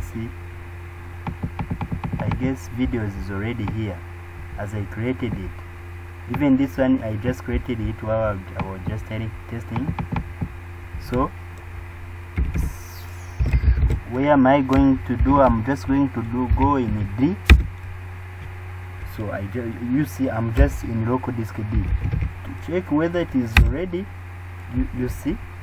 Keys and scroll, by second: 15.2 shift+d, 16.5 typing, 17.5 Return.